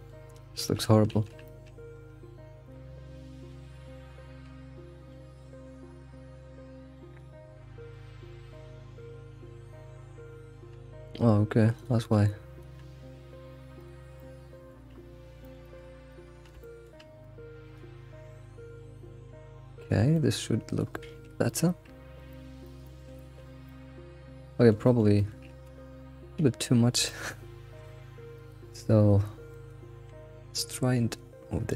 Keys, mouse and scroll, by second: 0.6 alt+shift+z, 1.1 alt+shift+z, 1.4-1.8 middle drag, 1.8 Tab, 2.7 shift+click, 3.2 middle drag, 3.7 middle click, 4.1-4.4 scroll up 3, 5.0 alt+x, 5.4 middle click, 6.1 middle click, 6.9 click, 9.4 click, 10.3-10.7 scroll down 2, 10.7 g, 12.1 click, 12.8 g, 14.0 scroll down 1, 14.2 middle click, 14.9 scroll up 1, 15.6 alt+middle click, 15.8 alt+middle click, 16.6 shift+middle click, 17.2 click, 18.0 g, 19.9 scroll down 1, 20.1 middle click, 21.1 alt+x, 21.4 scroll down 1, 21.5 middle click, 21.9-22.4 middle drag, 22.8 alt+middle click, 23.2 shift+middle click, 24.3 scroll up 2, 24.4 middle click, 25.7 alt+x, 26.1-26.8 scroll up 2, 27.1-28.3 shift+middle drag, 28.3 click, 29.5 click, 30.1 g.